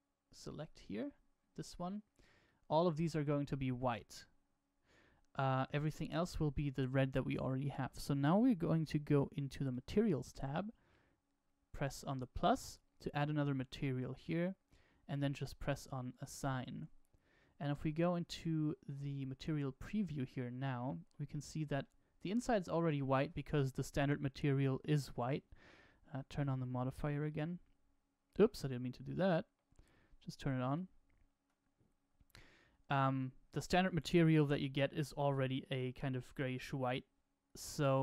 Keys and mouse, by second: 0.4 alt+shift+click, 2.4-6.3 middle drag, 6.3 right click, 12.5 click, 16.1-18.0 drag, 21.3 Tab, 21.8-22.9 middle drag, 26.2 click, 27.2 click, 29.2 ctrl+z, 30.6-31.9 drag, 33.1-33.8 middle drag, 34.0-34.4 shift+middle drag.